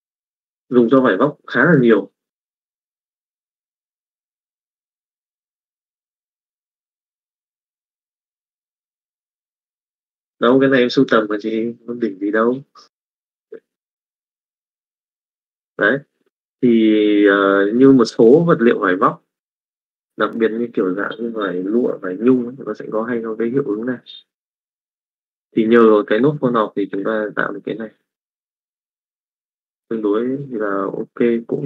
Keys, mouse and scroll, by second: 0.4 middle click, 14.6 middle click, 15.4 middle click, 16.4 middle click, 27.0 middle click, 27.7 middle click, 29.1 middle click, 30.6 middle click.